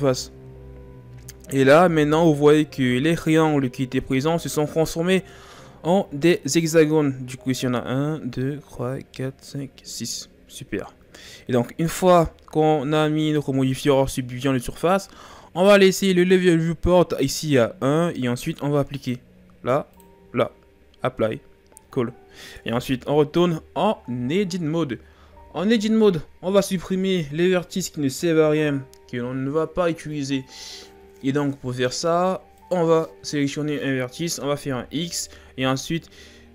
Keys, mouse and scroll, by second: 0.0 click, 2.2-2.9 shift+scroll down 4, 2.9-6.0 scroll up 2, 12.0-12.7 scroll down 4, 13.0-16.1 shift+scroll up 3, 19.0-22.1 drag, 22.7 Tab, 23.9-26.9 ctrl+scroll down 2, 32.6 right click, 34.6 x.